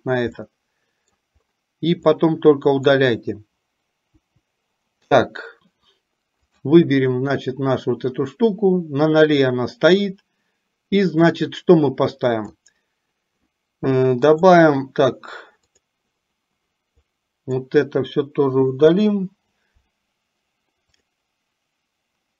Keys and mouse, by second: 0.4 middle click, 2.3 click, 4.3 Delete, 6.6 click, 11.4-12.6 drag, 14.4-15.4 right drag, 15.8 click, 17.0 click, 18.8 Delete, 21.0-22.3 drag.